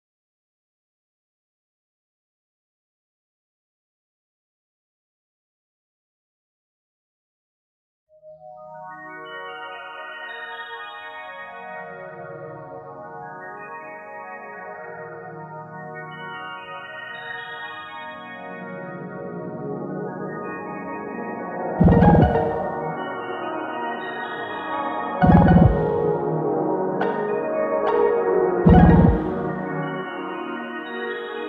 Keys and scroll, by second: 21.4 x, 26.4 ctrl+z, 29.8 ctrl+z.